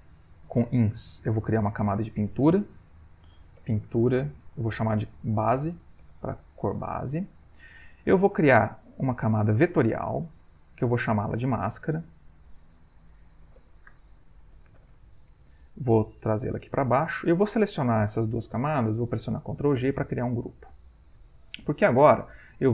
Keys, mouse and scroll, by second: 1.4 Insert, 2.2 click, 3.1-4.7 typing, 5.8-7.2 typing, 7.4 Return, 9.4 click, 10.5 click, 11.9 click, 12.8-15.3 typing, 16.3 click, 17.8 shift+click, 19.8 ctrl+g, 21.8 click.